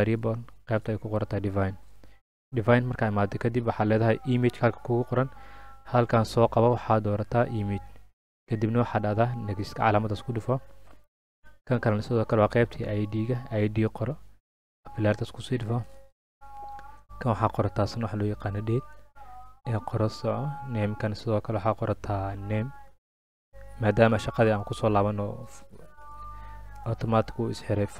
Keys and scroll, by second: 6.8-7.9 typing, 12.9-13.7 typing, 17.6-18.6 typing, 22.5-24.1 typing, 25.2-26.8 typing.